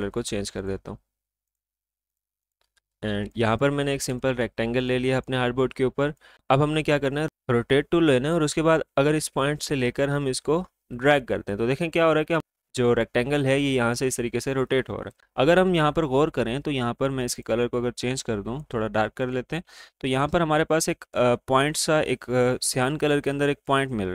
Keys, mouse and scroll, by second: 3.9 alt+scroll up 1, 4.1 space, 4.2 click, 9.4-17.0 drag, 17.6 click.